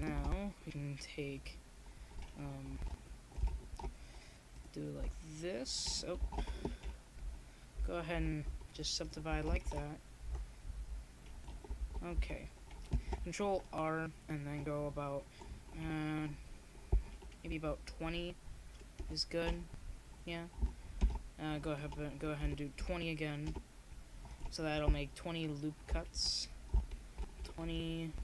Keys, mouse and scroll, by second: 2.0 Tab, 2.7 a, 3.2 ctrl+r, 4.5 scroll up 1, 6.0 click, 7.0 ctrl+r, 9.6 ctrl+z, 10.1 ctrl+r, 13.0 a, 13.4 ctrl+r, 15.3-16.7 drag, 15.6 ctrl+z, 16.0 ctrl+z, 17.0 ctrl+r, 17.0 click, 25.7 ctrl+r.